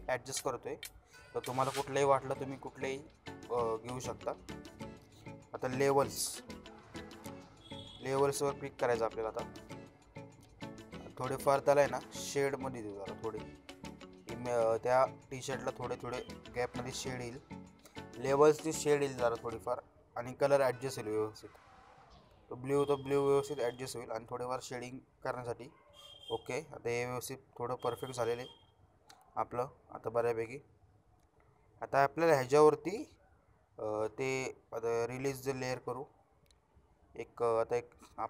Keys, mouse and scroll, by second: 8.0-10.6 drag, 12.5-15.8 drag, 33.3 right click, 34.8 click, 36.2-37.0 click.